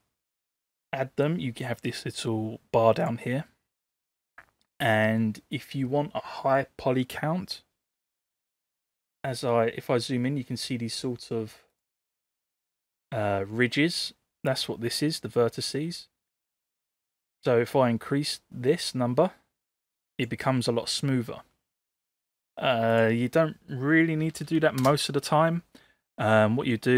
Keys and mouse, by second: 11.7 click, 15.9-20.3 drag, 23.0-25.5 drag, 24.5 0.